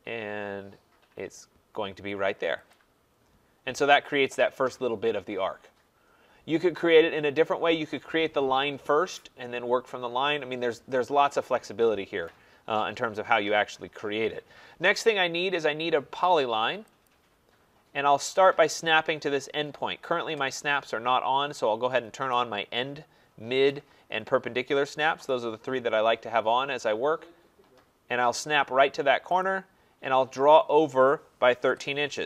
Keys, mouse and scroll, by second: 2.8 click, 13.1 middle click, 13.2 middle click, 13.5 middle click, 13.6 middle click, 13.7 middle click, 17.0 click, 22.3 click, 23.7 click, 29.4 click, 31.3-32.2 typing.